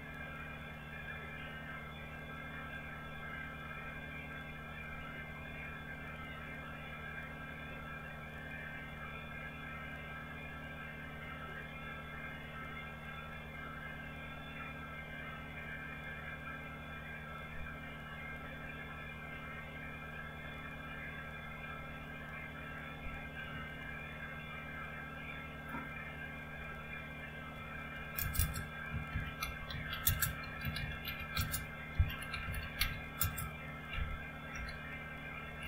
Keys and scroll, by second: 24.6 alt+Tab, 27.4-35.6 typing.